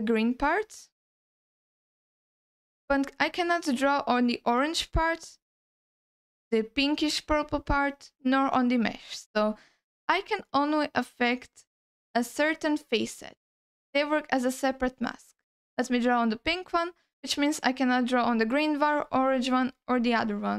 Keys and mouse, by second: 9.3 alt+middle click, 13.6 alt+middle click, 14.7 alt+middle click, 15.9-19.7 drag, 19.9 alt+middle click.